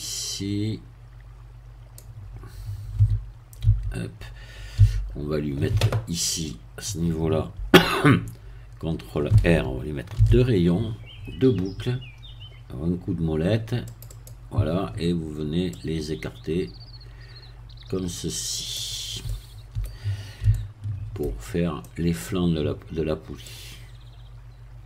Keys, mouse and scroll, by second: 0.0-2.1 drag, 3.0 z, 3.6 z, 4.8 a, 10.2 ctrl+r, 13.0-13.5 scroll up 2, 13.9 click, 15.8-19.0 drag, 19.2 middle click, 20.5-21.5 shift+middle drag, 21.5 shift+scroll up 3, 21.8 middle click, 23.4-24.8 drag.